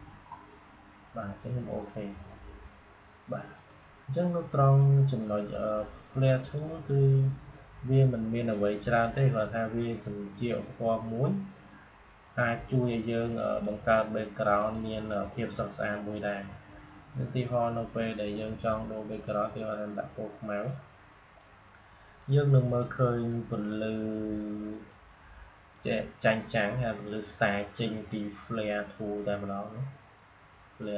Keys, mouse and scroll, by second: 1.6 click, 6.3-14.5 drag, 19.2-27.8 drag.